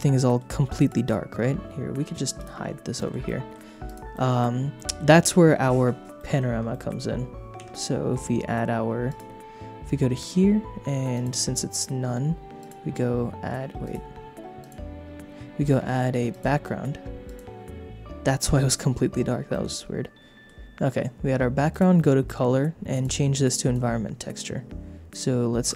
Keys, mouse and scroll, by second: 0.1 shift+middle click, 0.7 click, 2.3 click, 2.9 shift+middle click, 3.2 middle click, 3.8 click, 4.1 shift+middle click, 4.8 shift+middle click, 6.2 middle click, 6.7 shift+middle click, 7.6 shift+a, 9.1 click, 10.2 click, 11.1 click, 12.6-13.7 drag, 13.8 click, 14.6-16.5 drag, 17.2-19.2 drag, 19.5 middle click, 21.7 click, 22.9 click, 25.6 click.